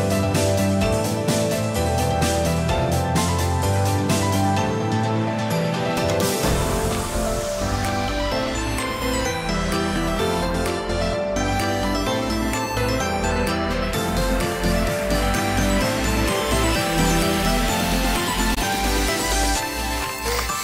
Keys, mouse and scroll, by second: 4.3 middle click, 7.9 alt+click, 8.5 scroll down 3, 8.7 middle click, 9.4 KP_1, 9.8 scroll up 1, 10.1 shift+middle click, 10.2 middle click, 12.0 s, 14.5 middle click, 15.7 KP_1, 16.4-16.9 scroll up 2, 17.1 shift+middle click, 18.5 e.